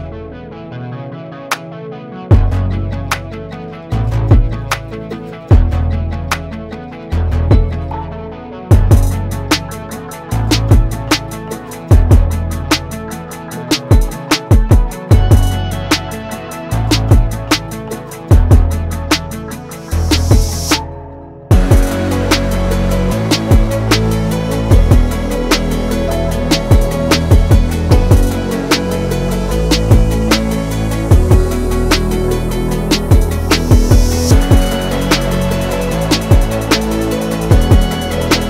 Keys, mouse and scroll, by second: 1.5 ctrl+g, 2.0 right click, 3.8-9.5 drag, 12.5 click, 12.7 right click, 13.6 click, 14.8 right click, 15.5 click, 17.4 click, 29.3-32.2 drag, 33.8 Down, 36.0 Up, 36.3 Down, 37.3-38.4 drag.